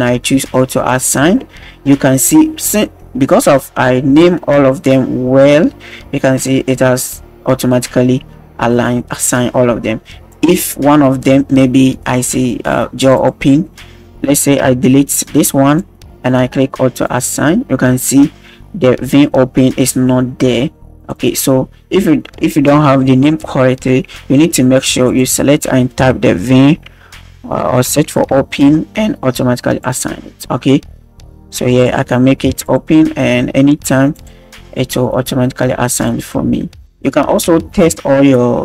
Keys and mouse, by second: 0.9 click, 10.3-12.3 drag, 13.0-15.7 drag, 17.0 click, 21.0 click, 21.1 drag, 25.1-29.9 drag, 27.7 BackSpace, 31.7-32.7 drag, 34.1 click, 35.9 click, 37.0 shift+middle drag, 37.7 KP_1.